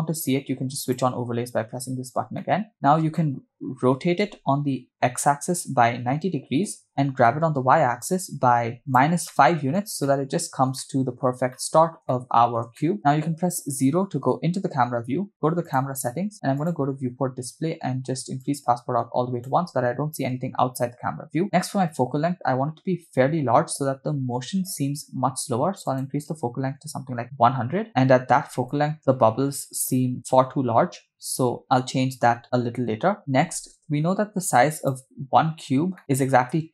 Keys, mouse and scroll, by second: 0.9 click, 2.5 middle click, 3.1-3.6 shift+middle drag, 4.3 r, 7.3 g, 9.3 middle click, 10.0-10.7 shift+middle drag, 10.8-11.3 middle drag, 11.5-12.0 shift+middle drag, 12.1-12.6 middle drag, 12.8 shift+middle click, 13.5 KP_0, 15.7 click, 16.6 click, 17.2-17.6 scroll down 2, 18.4-19.5 drag, 21.5-24.0 scroll up 3, 25.9-27.2 drag, 27.2 0, 27.9 space, 28.9 click, 33.8 KP_0, 34.8 click, 35.7 scroll down 2, 36.0 middle click.